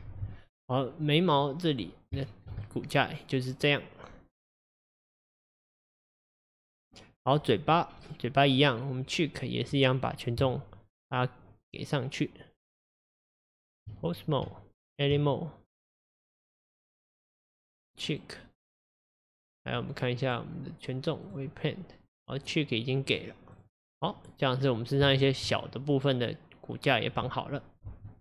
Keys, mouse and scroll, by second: 0.6-1.1 scroll up 2, 1.1-1.8 middle drag, 1.8 scroll up 2, 2.3-5.7 shift+middle drag, 7.4 scroll up 1, 8.1 click, 10.5 Tab, 14.1 click, 14.5 Tab, 15.9 click, 16.4-18.1 middle drag, 18.1 click, 19.4 click, 20.3-24.1 drag, 24.1-24.7 middle drag, 24.7-25.1 scroll down 2, 25.2-28.2 shift+middle drag.